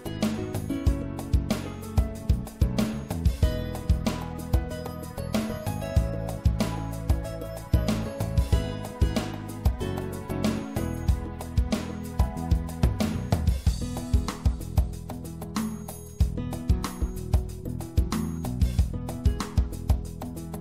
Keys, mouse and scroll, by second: 0.5 w, 4.2-10.8 drag, 12.5-19.2 drag, 18.8 w.